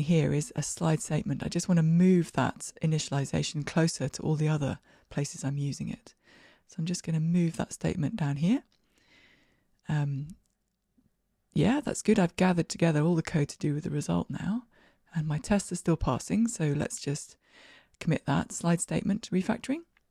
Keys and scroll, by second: 5.4 super+x, 7.7 super+v, 14.6 ctrl+r, 14.6 shift+F10, 16.5 super+k.